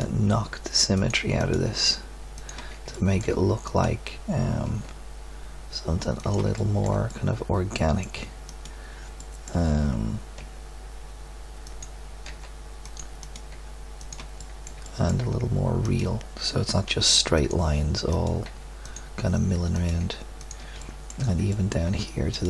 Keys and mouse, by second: 0.2 g, 1.8 g, 2.9-4.9 drag, 4.6 g, 6.5 middle click, 9.3 middle click, 10.4 g, 12.2 g, 13.5 g, 14.4 middle click, 15.0 click, 16.8 g, 18.4 g, 20.0 g, 20.8-22.3 middle drag.